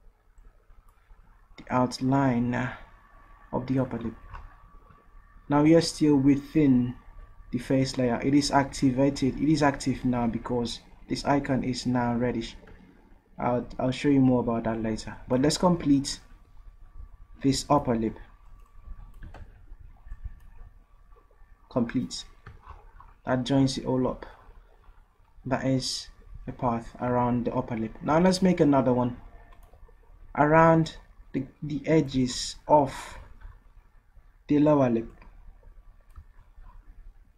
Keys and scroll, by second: 19.5 ctrl+z.